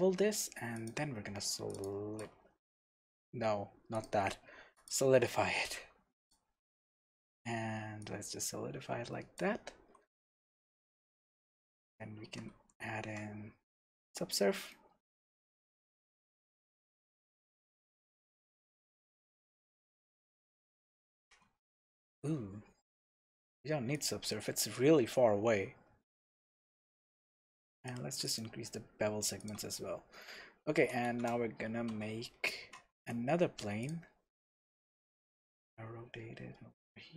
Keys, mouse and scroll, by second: 3.3 ctrl+z, 3.9-6.5 drag, 5.4-5.8 scroll down 1, 6.8 scroll up 1, 8.0-14.7 drag, 9.8 Tab, 10.0 scroll down 1, 10.8 scroll up 1, 11.7 ctrl+1, 12.3 ctrl+2, 12.5 ctrl+3, 13.6-14.7 scroll down 1, 14.7-18.2 middle drag, 17.3 Tab, 17.5-17.9 scroll up 1, 18.9 alt+a, 19.3-23.9 middle drag, 20.4 Tab, 21.3 shift+a, 22.0 Escape, 22.4 Tab, 23.9-29.1 drag, 24.5-24.8 scroll down 2, 24.8-26.1 scroll up 2, 26.1-27.7 scroll up 1, 29.4 click, 30.1 scroll up 1, 30.3 Tab, 30.7 scroll down 1, 31.1 shift+s, 32.0 Escape, 32.6 shift+a, 34.8 s.